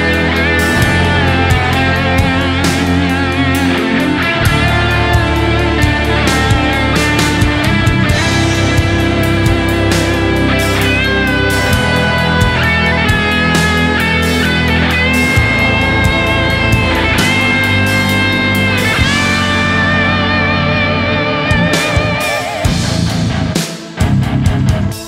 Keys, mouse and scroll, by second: 2.3 s, 3.3 shift+click, 4.5 shift+click, 4.6 alt+right click, 4.9 shift+click, 5.0 shift+double click, 5.3 alt+right click, 5.8 alt+right click, 6.0 alt+right click, 6.8-7.7 typing, 8.0 double click, 9.3 alt+right click, 9.5 alt+right click, 13.7 alt+right click, 14.2 alt+right click, 14.6 alt+right click, 15.2 alt+right click, 16.0 alt+right click, 16.2 alt+right click, 19.3 alt+right click, 23.8 typing.